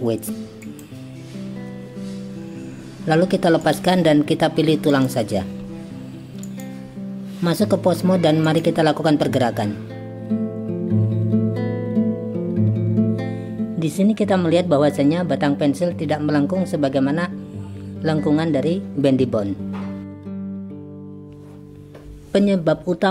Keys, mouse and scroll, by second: 3.6 click, 4.9 click, 6.5-8.6 drag, 12.4 g, 20.5 click.